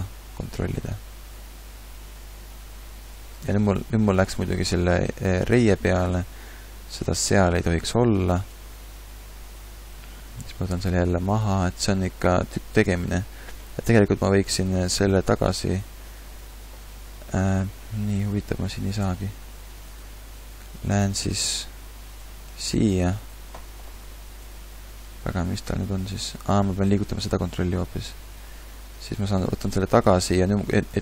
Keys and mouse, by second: 14.9 r, 16.9 r, 22.5 r, 23.9 r, 23.9 g, 27.0 g.